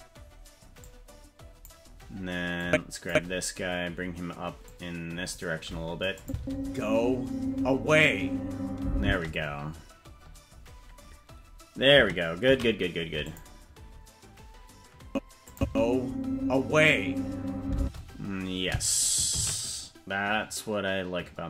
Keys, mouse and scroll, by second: 0.8 click, 2.6 click, 4.6 click, 6.2 click, 6.3 space, 9.0 space, 14.9 ctrl+s, 15.5-18.0 drag, 15.6 space, 17.8 space.